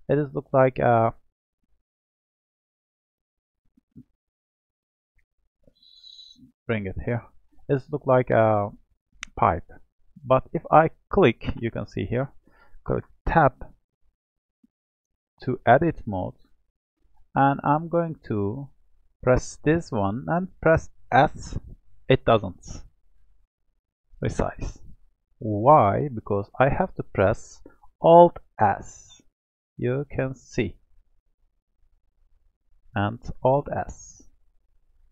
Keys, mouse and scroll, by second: 0.9-1.4 scroll down 1, 1.4-4.1 middle drag, 4.1 click, 5.6 click, 7.4-10.4 middle drag, 10.4 click, 13.1 Tab, 14.2-17.3 middle drag, 18.6 click, 21.1 s, 25.5 ctrl+z, 28.5-30.6 alt+s, 31.0-31.6 scroll up 4, 31.6-33.4 middle drag, 33.4-35.1 alt+s.